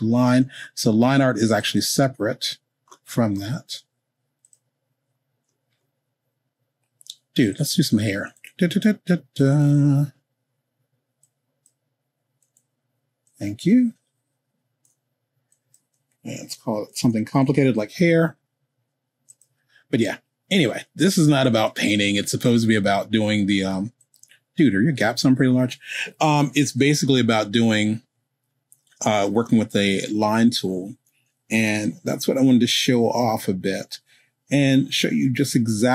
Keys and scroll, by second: 16.4-18.2 typing, 31.5 k.